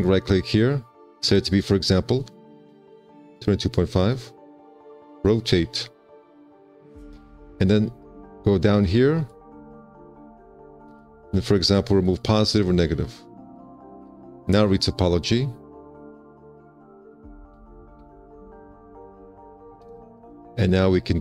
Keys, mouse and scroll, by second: 7.3 q, 18.3 2, 18.3 5.